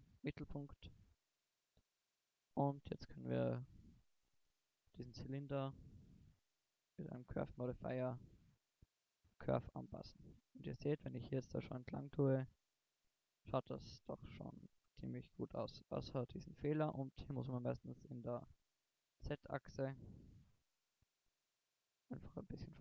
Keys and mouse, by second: 0.0 drag, 0.4 middle click, 2.1 click, 4.2 click, 5.8-7.7 middle drag, 8.1-9.1 right drag, 9.1-10.5 middle drag, 10.5 click, 11.1 middle drag, 13.9-14.5 middle drag, 15.5 g, 22.6 click.